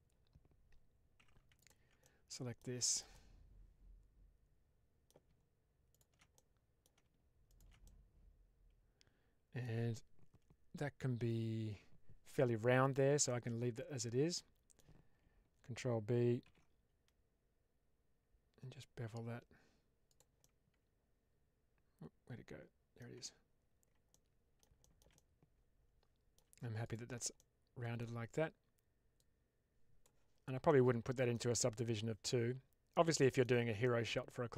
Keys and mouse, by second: 1.1 2, 1.9 middle click, 2.7 shift+middle click, 3.0-5.0 middle drag, 5.8 alt+shift+click, 6.2 middle click, 7.7-9.6 middle drag, 13.2-14.7 middle drag, 16.3 ctrl+b, 20.0 click, 20.3-22.9 middle drag, 23.0 Tab, 24.0-24.5 middle drag, 24.7-26.3 middle drag, 25.3 right drag, 25.9 right click, 27.3-27.9 middle drag, 27.9 right click, 29.1 click, 30.6-31.2 middle drag, 31.7-32.8 middle drag, 33.2 shift+middle click, 33.7-34.2 middle drag.